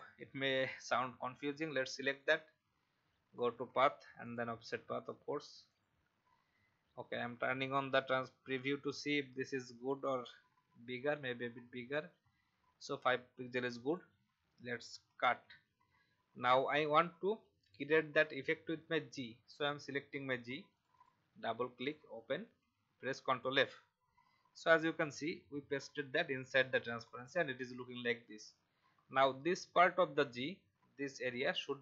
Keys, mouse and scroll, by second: 11.5-13.9 scroll down 1, 13.9 click, 15.3 ctrl+x, 16.3-17.6 alt+scroll down 1, 17.6 click, 22.4 ctrl+f, 27.0 click, 31.0 click.